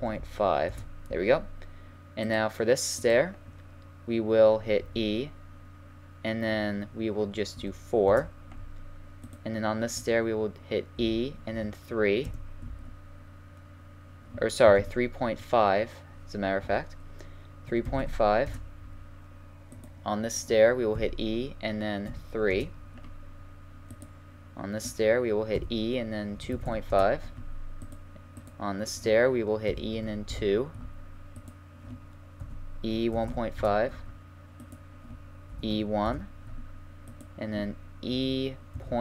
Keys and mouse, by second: 3.0 right click, 4.8 e, 9.2-11.1 right drag, 11.0 e, 14.8 ctrl+z, 16.6 e, 19.7-21.0 right drag, 21.0 e, 23.9 right click, 25.5 right click, 25.5 e, 28.4-30.2 right drag, 29.7 e, 31.4-33.2 right drag, 32.4 e, 34.6 right click, 35.5 e, 37.1 right click, 38.1 e.